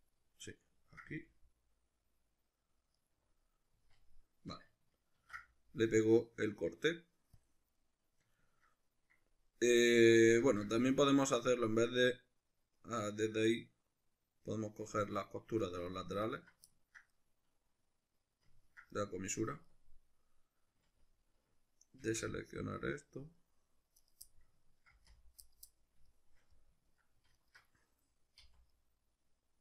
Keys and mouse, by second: 0.0 shift+right click, 0.5-3.1 ctrl+middle drag, 1.1 g, 3.1 right click, 3.8 z, 5.2 ctrl+e, 7.8-16.3 middle drag, 10.4 ctrl+z, 16.3 alt+right click, 16.7-22.1 ctrl+middle drag, 22.1 c, 24.1 right click, 24.3 middle click, 24.9 c, 25.5 right click, 25.7-27.4 middle drag, 27.4 alt+shift+right click, 28.4 c.